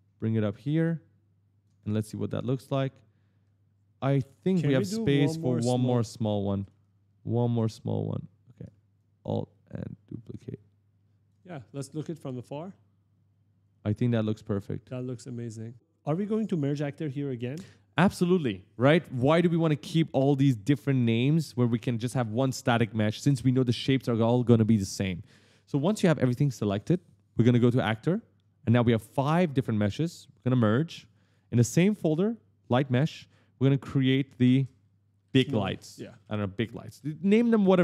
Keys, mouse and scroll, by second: 1.4-2.4 typing, 1.6 right click, 3.5-6.2 typing, 7.5 click, 8.8 alt+click, 11.3 right click, 11.7 click, 11.9 d, 12.1 right click, 14.0-15.6 typing, 15.7 scroll up 1, 27.8 click, 30.4 click, 32.4 click, 33.8 click, 34.2 ctrl+a, 34.8-36.5 typing.